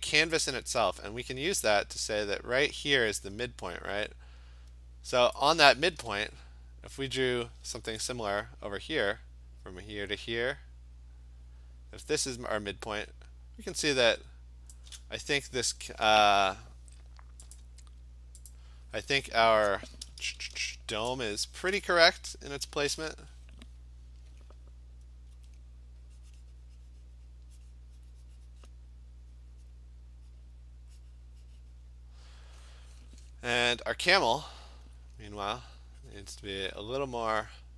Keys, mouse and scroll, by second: 5.4 shift+click, 14.8 click, 17.6 click, 18.6 click, 18.7 shift+click, 20.4 ctrl+shift+n, 20.8 Return, 22.7 b, 25.4 alt+click, 28.7 click, 29.8 click, 30.5 click, 30.6 click, 31.9 click, 34.9 alt+click, 35.6 alt+click, 37.0 click.